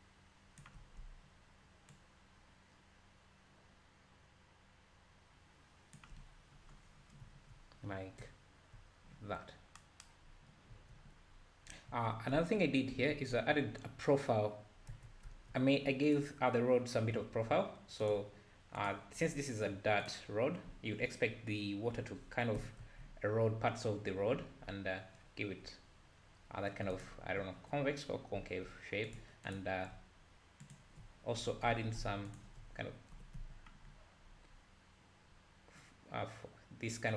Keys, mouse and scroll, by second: 6.5-7.2 scroll down 4, 7.2 `, 7.9 scroll up 1, 10.3-10.7 scroll down 1, 11.3-11.9 scroll up 2, 12.4 Tab, 12.9 Tab, 13.3 `, 14.9 Tab, 15.3 `, 16.2 alt+click, 18.1 alt+click, 18.9 alt+click, 20.1 alt+click, 22.0 o, 22.6 g, 28.4 `, 29.5 alt+click, 31.7 ctrl+z, 32.4 alt+shift+click, 33.2 g.